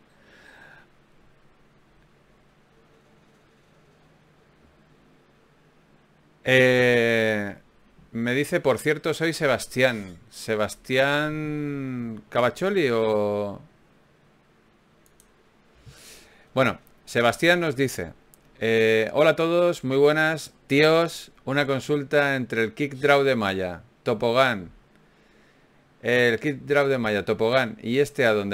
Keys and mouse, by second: 1.1 ctrl+Tab, 2.3-3.6 right drag, 3.3 click, 4.6 click, 4.6 right click, 4.6 f, 6.5 f, 7.5 f, 9.3 f, 12.1 ctrl+r, 13.6 g, 15.7-17.6 right drag, 17.2 f, 17.6-19.6 middle drag, 20.0 ctrl+Tab, 20.8 right click, 21.6-25.0 typing, 26.0 g, 27.2 g, 28.4 g.